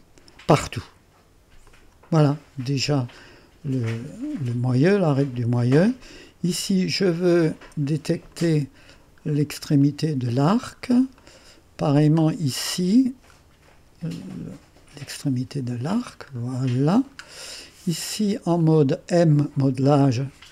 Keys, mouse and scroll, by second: 1.7 click, 2.6-3.2 scroll up 2, 3.2 right click, 4.1-4.5 scroll up 2, 4.5 right click, 5.1-6.0 scroll up 2, 6.1 right click, 8.3 click, 9.3 middle click, 9.9 right click, 10.7 middle click, 11.2 right click, 12.2-15.2 scroll up 4, 12.7-13.8 right drag, 15.2 click, 16.0-17.1 scroll down 2, 17.5 right click, 18.2 scroll up 1, 18.7 right click.